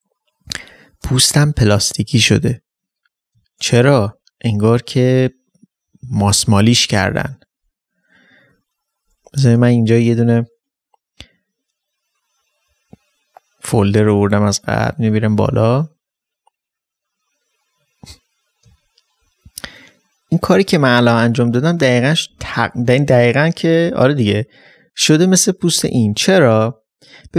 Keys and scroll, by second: 4.1 ctrl+space.